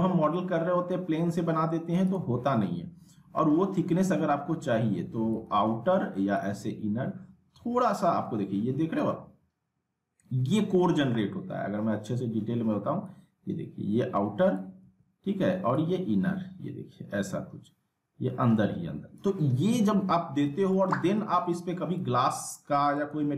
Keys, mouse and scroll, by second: 0.1 s, 2.1-5.6 drag, 5.7 ctrl+z, 6.3-9.2 drag, 9.3-10.7 scroll up 1, 10.9 ctrl+z, 13.0-14.6 drag, 14.8 ctrl+z, 15.7-19.2 drag, 20.4 z, 20.7-21.3 alt+middle click, 21.9 z, 22.5-23.1 alt+middle click, 23.1 z.